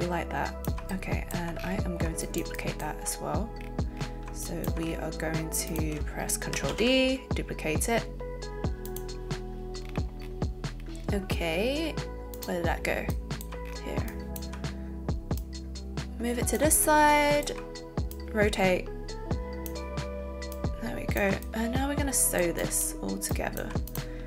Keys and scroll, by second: 6.7 ctrl+d.